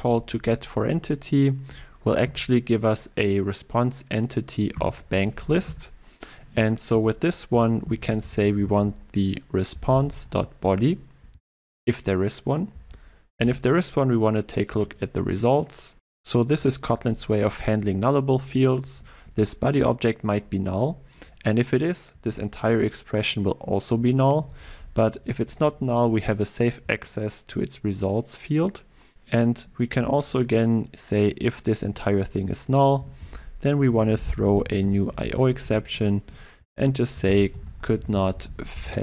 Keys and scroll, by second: 0.8 alt+Return, 4.9 Return, 10.7 Return, 19.3 ctrl+w, 35.8 Return.